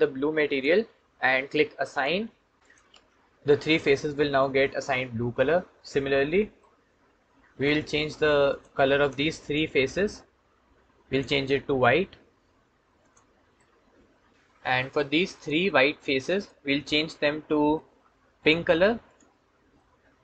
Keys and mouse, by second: 0.3 click, 1.7 click, 6.4-7.5 drag, 8.8 shift+click, 9.3 shift+click, 10.9 click, 13.0 click, 13.8 middle click, 17.0 middle click, 18.2 click, 18.9 click, 19.6 middle click.